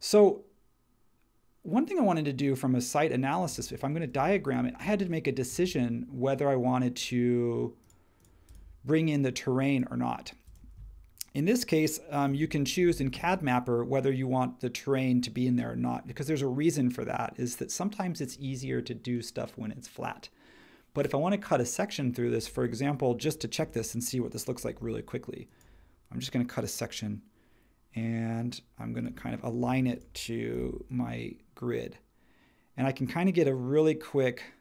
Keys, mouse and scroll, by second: 4.1 space, 12.3 shift+x, 30.5 m.